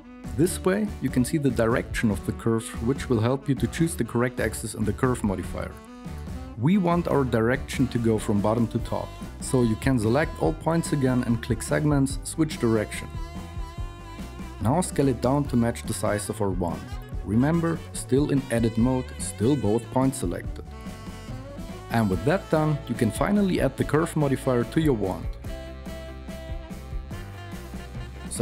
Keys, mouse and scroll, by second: 8.3 a, 15.2 KP_1, 16.2 s, 17.2 g, 18.5 s, 22.5 Tab.